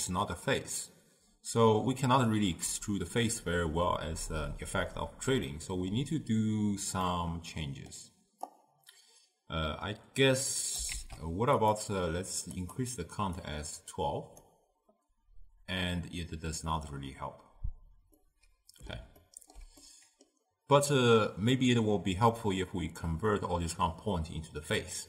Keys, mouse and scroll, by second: 5.5-8.5 middle drag, 8.5 click, 11.0 shift+d, 12.5-16.5 drag, 18.3 middle click, 19.3-22.9 ctrl+middle drag.